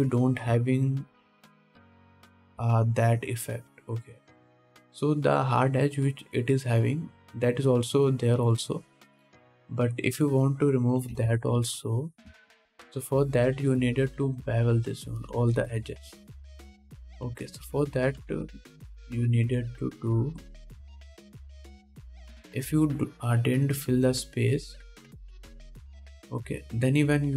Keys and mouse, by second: 0.3 click, 0.5-11.6 drag, 11.6 middle click, 11.7-14.4 drag, 12.4 Tab, 12.8 alt+a, 15.5 2, 18.3 ctrl+z, 18.5 ctrl+z, 18.8 ctrl+z, 19.0 ctrl+z, 19.4 ctrl+z, 19.7 ctrl+z, 20.0 ctrl+z, 20.0-27.3 ctrl+drag, 20.2 ctrl+z, 20.4 ctrl+z, 21.1 ctrl+z, 22.9 ctrl+Tab, 26.5 middle click, 26.5 right click.